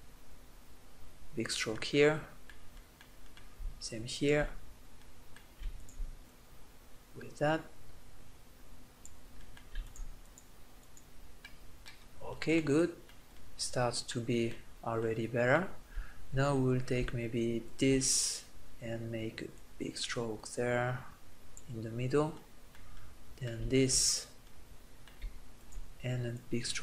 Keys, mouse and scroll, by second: 0.7 middle click, 1.5 middle click, 1.9 middle click, 3.9-6.5 drag, 9.6-11.6 middle drag, 11.6 click, 11.8 middle click, 11.9 click, 12.6-14.5 middle drag, 16.5-22.1 middle drag, 25.3-26.8 drag.